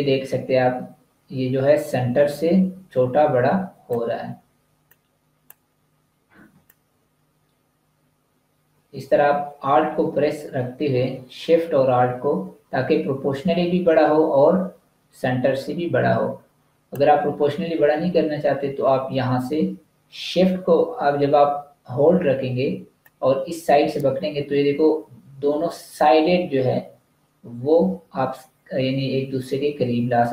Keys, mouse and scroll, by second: 4.8 click, 6.6 alt+shift+click, 22.9 alt+click.